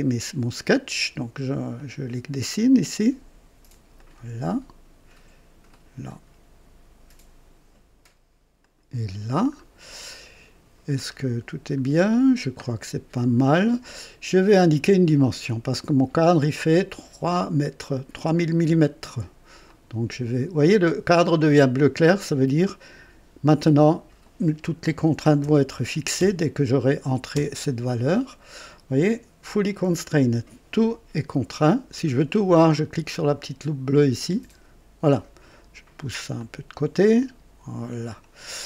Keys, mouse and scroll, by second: 1.7 click, 3.9 click, 5.7 click, 8.6 click, 9.6 scroll up 1, 10.1 right click, 11.0-11.5 scroll up 1, 11.9-12.4 scroll down 1, 13.4 right click, 17.9 click, 19.6 click, 24.9 KP_3, 25.4 KP_0, 26.1 KP_0, 27.3 KP_Enter, 34.1 click, 36.3-38.4 drag.